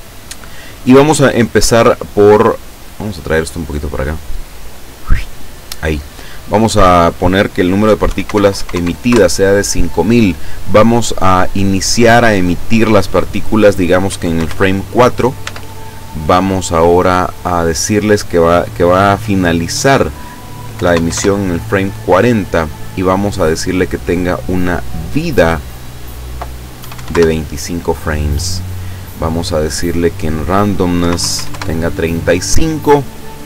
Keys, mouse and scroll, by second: 4.6-5.8 drag, 6.4 click, 8.1 KP_5, 8.3 KP_0, 9.1 KP_Enter, 11.7 click, 14.1 KP_4, 14.4 KP_Enter, 15.5 Tab, 17.4 click, 20.8 KP_4, 21.0 KP_0, 21.1 KP_Enter, 25.6 click, 26.8 KP_2, 27.0 KP_5, 27.1 KP_Enter, 29.2 click, 31.0 KP_Decimal, 31.2 KP_3, 31.4 KP_5, 31.5 KP_Enter, 33.1-33.4 scroll down 1.